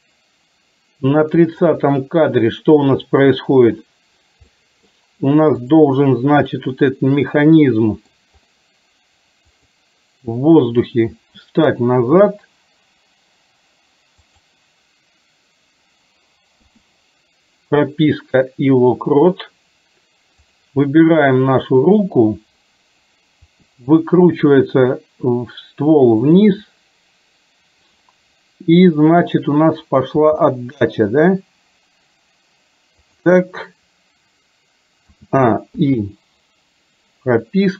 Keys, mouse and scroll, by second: 4.7 middle click, 5.8 drag, 6.5-8.3 middle drag, 9.5 click, 12.2 g, 23.5 r, 30.3 g, 35.2 a, 35.9 i.